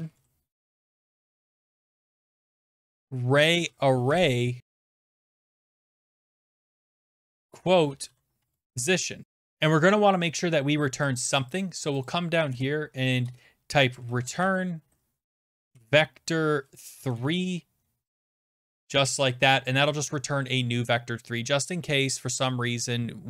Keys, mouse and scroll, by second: 0.0-9.2 typing, 9.2 ctrl+z, 9.2 click, 9.2-11.1 scroll down 6, 11.1 click, 11.6 click, 12.1 click, 12.5 Return, 13.2-16.2 typing, 17.0 Down, 17.1 Return, 18.3-19.2 typing, 19.8 click.